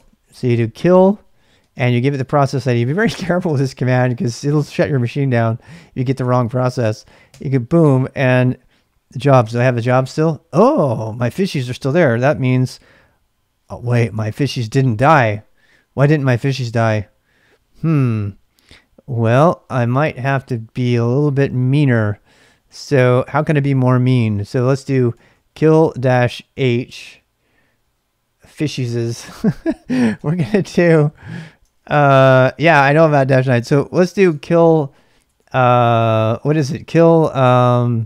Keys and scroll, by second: 0.0-0.4 typing, 1.6 space, 7.3 Return, 8.8-9.8 typing, 11.0-14.2 typing, 12.3 ctrl+b, 19.5 ctrl+[, 19.7 typing, 20.8-23.7 typing, 23.2 ctrl+c, 24.8-26.6 typing, 30.1 Return, 31.6-32.3 typing, 34.3-35.2 typing.